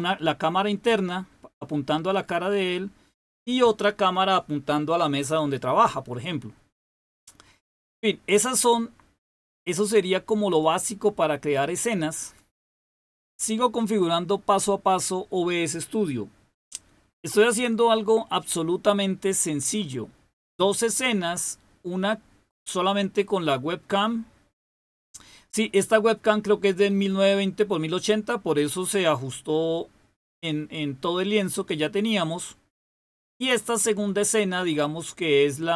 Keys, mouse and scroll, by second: 8.3 click, 9.5 click, 10.4 click, 11.5 click, 32.7 click.